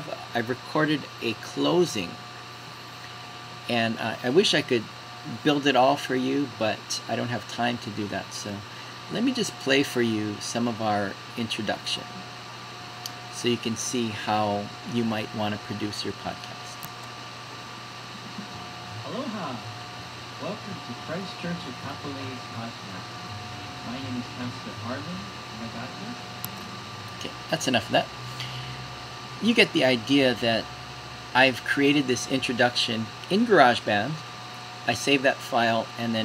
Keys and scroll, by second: 17.1 super+End.